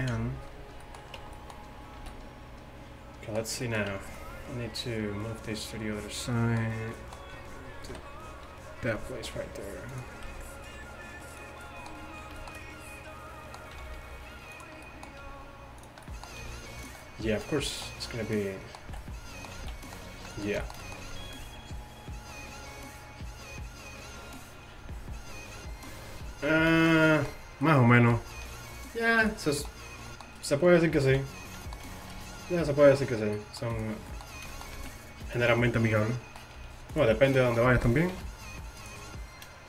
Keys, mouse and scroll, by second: 1.2 Tab, 2.0 a, 3.9 Tab, 8.0 KP_7, 9.3 r, 10.3 g, 13.9 r, 15.3 r, 16.5 g, 18.9 z, 19.6 z, 26.8 middle click, 28.4 r, 30.8 z, 32.2 c, 34.8 z, 36.6 g, 38.2 r.